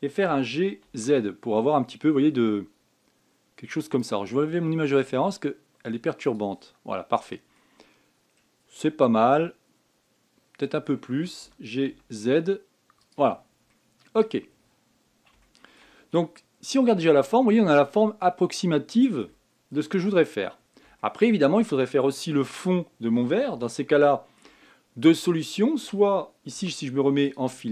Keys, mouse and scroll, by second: 1.0 g, 7.0 click, 8.3-11.3 middle drag, 11.7-12.2 scroll up 1, 12.2 g, 14.1-14.4 scroll down 1, 14.4 middle click, 15.2-15.6 scroll down 4, 16.2-17.4 shift+middle drag, 17.4 scroll down 4, 17.8-20.6 middle drag, 20.6 scroll up 5, 21.3 scroll down 2, 21.7 shift+middle click, 22.2-23.1 shift+scroll up 1, 23.1 KP_1, 24.4-27.3 shift+middle drag, 27.3 z.